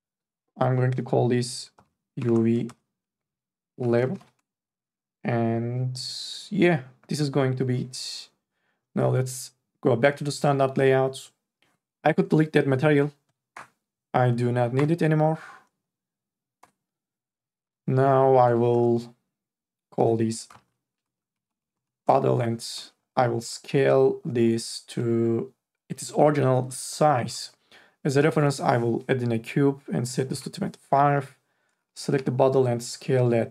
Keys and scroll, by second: 2.1-4.0 typing, 4.4 Return, 13.8 Delete, 18.9 4, 20.5-21.8 typing, 22.1 Return, 30.2 KP_2, 30.6 KP_5, 32.1 t.